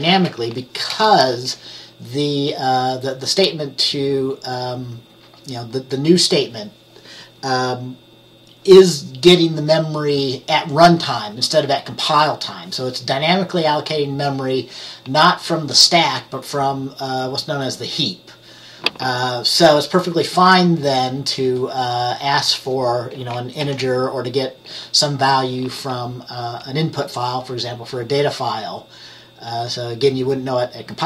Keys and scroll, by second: 0.0-0.2 typing, 23.7 ctrl+s.